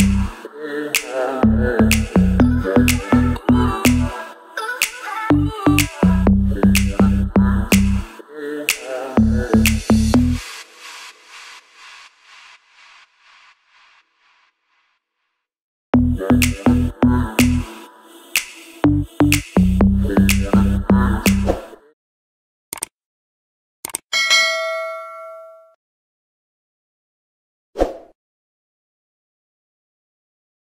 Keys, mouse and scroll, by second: 0.4 click, 0.6 Left, 0.9 click, 2.3 c, 2.7 click, 4.0 Left, 4.4 click, 4.6 Right, 4.8 click, 5.0-5.4 scroll down 1, 5.4-6.3 scroll up 1, 7.0 scroll down 1, 8.8 scroll up 1, 9.2 click, 10.5 Up, 11.3 click, 12.5 right click, 13.3 click, 14.7 right click, 15.2 click.